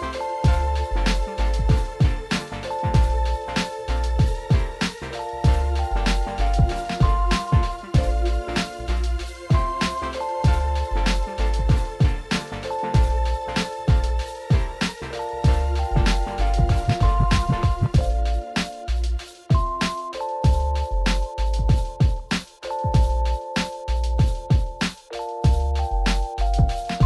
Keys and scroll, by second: 21.7 ctrl+z, 22.5 ctrl+z, 23.7 ctrl+z.